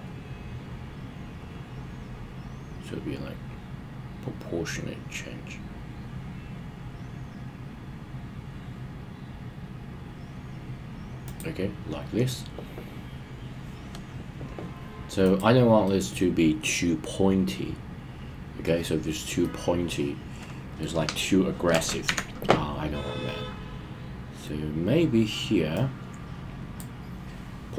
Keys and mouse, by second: 11.2 click, 15.2 click, 15.8-18.6 middle drag, 19.4-20.8 middle drag, 22.0 KP_1, 25.7-27.0 drag.